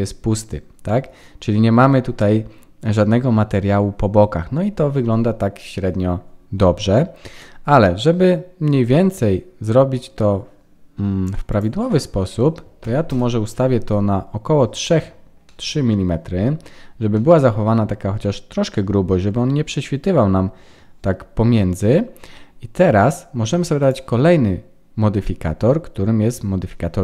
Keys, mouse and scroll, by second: 6.7 middle click, 8.8 click, 11.5 click, 15.4 middle click, 16.4 scroll up 4, 17.1 middle click, 22.0-23.6 scroll down 1, 23.8 click.